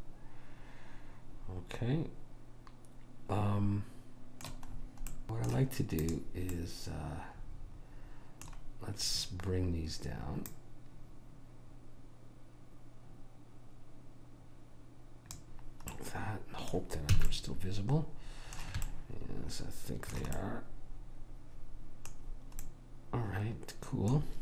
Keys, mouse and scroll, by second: 5.2 middle click, 6.1 click, 6.1-8.0 middle drag, 8.3 middle click, 10.6 click, 16.1-18.0 middle drag, 17.3 a, 21.5 middle click.